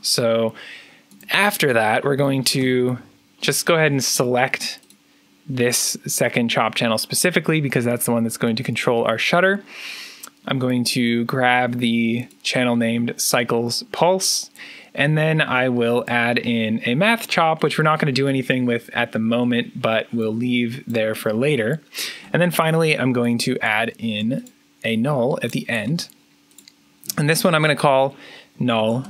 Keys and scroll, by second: 1.9-3.0 typing, 23.7 alt+n, 28.7-29.0 typing.